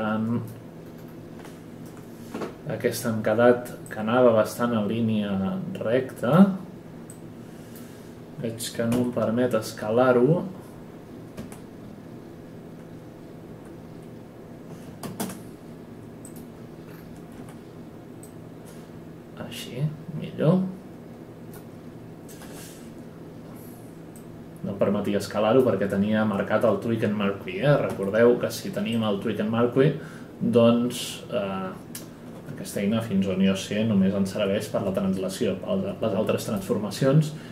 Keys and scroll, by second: 8.9 r, 11.3 r, 13.5 w, 17.3 r, 22.4 e, 27.9 w.